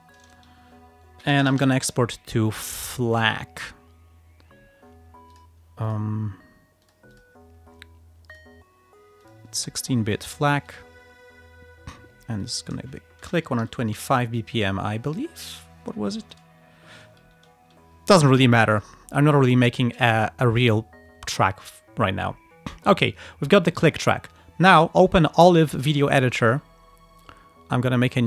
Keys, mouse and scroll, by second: 1.1-2.2 typing, 2.8 click, 4.9-5.2 scroll down 1, 5.4 click, 5.9 click, 6.9 click, 7.8 scroll down 1, 8.4 click, 9.3 click, 9.9 click, 10.8 click, 12.5 click, 13.3-14.5 typing, 16.6 BackSpace, 17.3 End, 18.8 click, 23.9 click, 24.9 click, 26.4 right click.